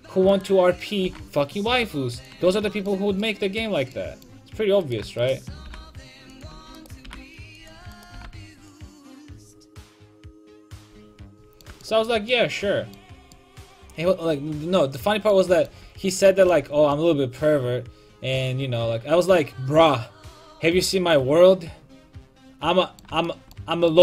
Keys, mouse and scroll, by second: 0.3-2.1 right drag, 1.0 g, 2.4 a, 2.5-4.8 middle drag, 4.8-7.0 right drag, 5.6 g, 6.4 click, 6.5 a, 7.0 g, 8.1 g, 9.0 a, 15.8 a, 16.6 a, 21.9-24.0 middle drag.